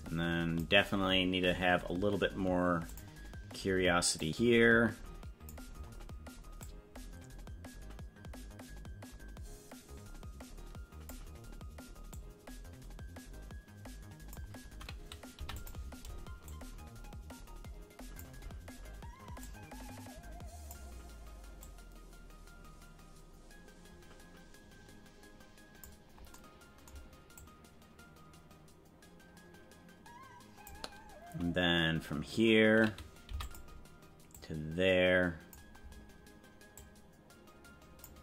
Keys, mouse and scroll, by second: 2.8 click, 4.2 click, 6.6-11.3 drag, 12.3-14.5 drag, 15.4 i, 16.6 click, 19.4-20.9 drag, 21.8-26.1 drag, 27.5-30.9 drag, 33.4 i, 34.5-35.8 drag, 36.7-38.1 drag.